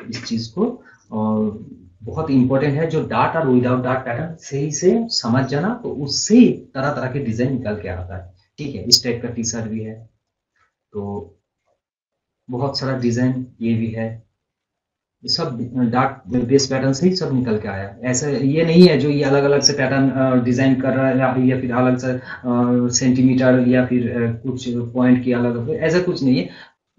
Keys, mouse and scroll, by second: 2.1 scroll down 1, 8.7 scroll down 1, 9.1 scroll up 1, 10.1 click, 10.7 click, 10.9-11.2 scroll down 1, 12.2 scroll down 1, 15.7 scroll down 1, 16.3 scroll up 1, 18.8-21.6 drag.